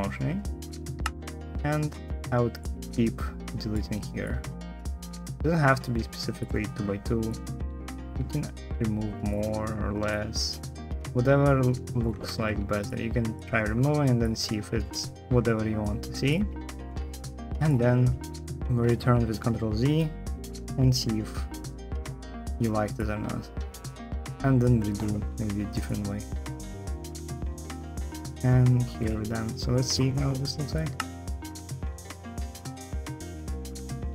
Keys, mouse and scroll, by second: 0.8 space, 28.9 shift+Delete, 30.7 space.